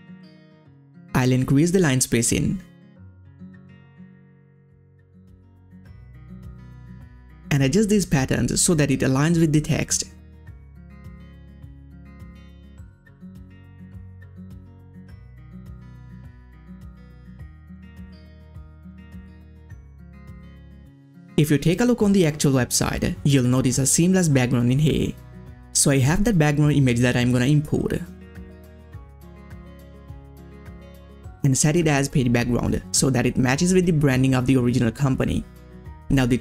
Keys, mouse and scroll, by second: 1.8 Up, 4.4 Down, 5.2-15.3 drag, 16.2-19.0 drag, 19.7 click, 20.6 ctrl+scroll up 1, 21.3 click, 24.6-25.4 scroll up 1, 25.4-31.6 drag, 31.6 scroll down 1, 33.0 click, 36.1 click, 36.1 click.